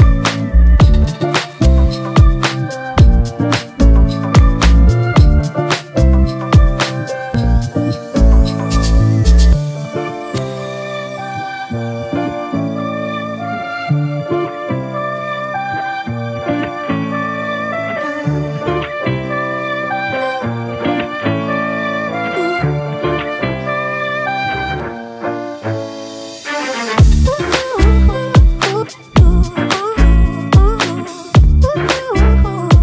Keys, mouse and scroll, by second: 9.9-12.3 scroll up 1, 18.1 double click, 20.1-22.4 scroll down 1, 23.9-24.4 scroll down 1, 26.9-31.9 typing.